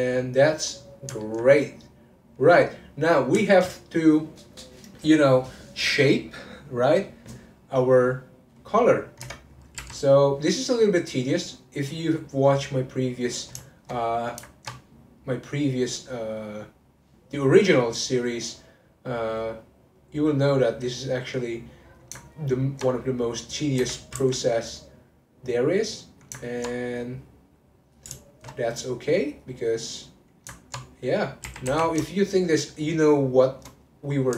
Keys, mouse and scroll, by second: 8.5 middle click, 9.2 Tab, 9.8 3, 11.0-13.6 drag, 13.6-15.2 shift+middle drag, 15.2-19.1 drag, 19.9 click, 20.5-21.6 middle drag, 21.6 click, 22.2-23.8 ctrl+middle drag, 23.8 r, 25.7-28.3 middle drag, 28.3 alt+shift+click, 28.7 click, 29.6-31.4 middle drag, 31.4 r, 33.7 middle click.